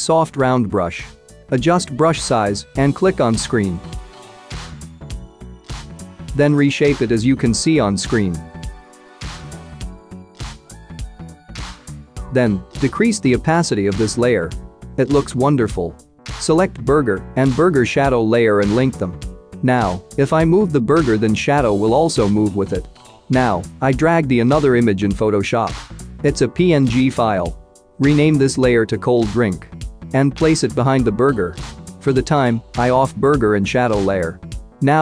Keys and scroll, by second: 27.7-29.6 typing.